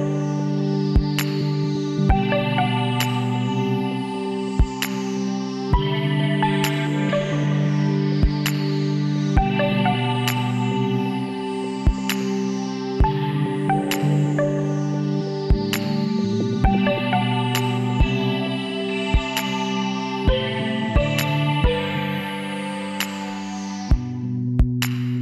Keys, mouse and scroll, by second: 4.8 middle click, 5.5 click, 6.3 x, 8.2 ctrl+z, 9.1 x, 12.5 click, 12.9 KP_1, 13.4 click, 14.1 middle click, 14.5 ctrl+r, 17.4-19.5 middle drag, 19.5 right click, 19.5 l, 20.6-22.5 drag, 24.5-25.2 middle drag.